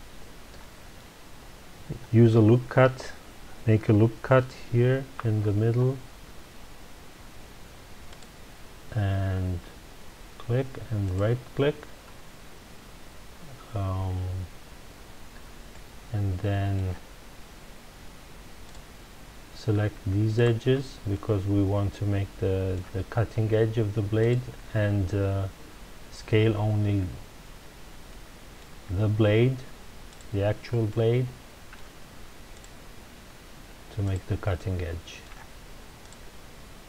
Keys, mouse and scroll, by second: 5.1 ctrl+r, 11.1 right click, 15.7-18.6 middle drag, 18.6 click, 20.3 shift+click, 21.1-24.2 middle drag, 24.2 shift+click, 28.1-30.1 middle drag, 30.1 shift+click, 30.9-32.5 middle drag, 32.5 shift+click, 34.0 shift+click, 34.5-36.0 middle drag, 36.0 shift+click.